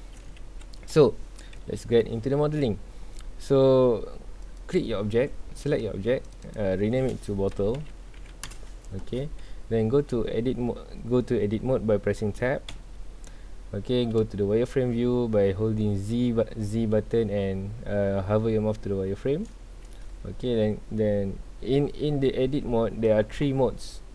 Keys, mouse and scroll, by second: 0.4 ctrl+s, 0.7-1.5 scroll down 2, 1.5 KP_1, 2.8-4.4 scroll up 2, 4.4 click, 6.2 click, 6.4-8.1 drag, 8.1 t, 12.7 Tab, 13.2 scroll down 1, 14.2 z.